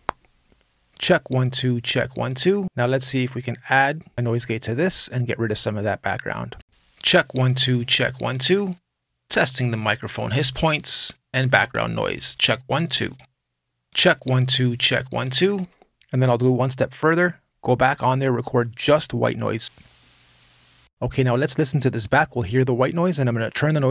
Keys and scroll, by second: 6.4 space, 15.3 space, 20.5 space.